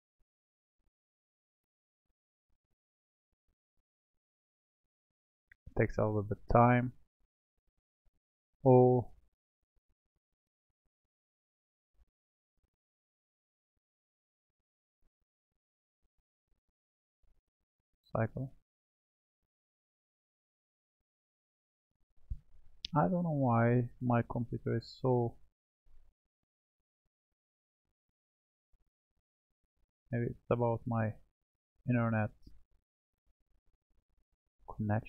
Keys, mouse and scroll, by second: 4.1-4.7 scroll up 2, 4.7-5.5 scroll down 1, 5.5-8.5 middle drag, 10.1-13.2 scroll down 1, 15.8 click, 17.2-20.2 drag.